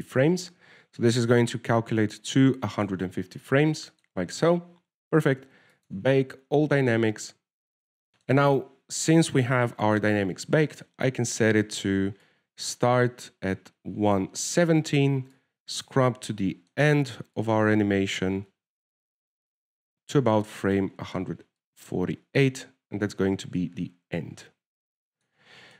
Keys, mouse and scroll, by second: 0.6 right click, 1.8 click, 5.3 right click, 7.1 click, 9.2 shift+middle click, 10.9 KP_0, 11.5-12.0 scroll up 4, 12.0 shift+middle click, 13.6 click, 17.6 shift+middle click, 18.7 click, 22.9 click.